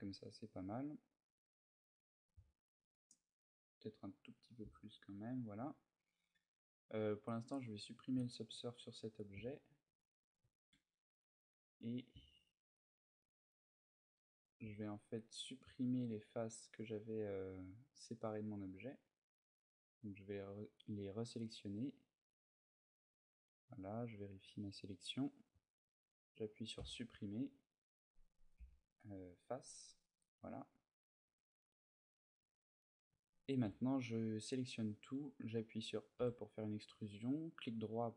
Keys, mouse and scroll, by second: 0.9 middle click, 2.5 z, 3.4 middle click, 4.0 s, 5.3 shift+click, 5.7 middle click, 7.0 click, 8.3 a, 8.6 middle click, 9.8 ctrl+alt+middle click, 10.5 middle click, 12.0 ctrl+middle click, 12.4 ctrl+middle click, 13.3 middle click, 14.4 c, 22.7 right click, 23.0 middle click, 26.5 Delete, 28.3 Delete, 29.8 middle click, 30.6 middle click, 31.0 Tab, 31.3 middle click, 32.5 middle click, 32.9 Tab, 33.8 middle click, 36.0 e, 37.4 right click, 38.0 middle click.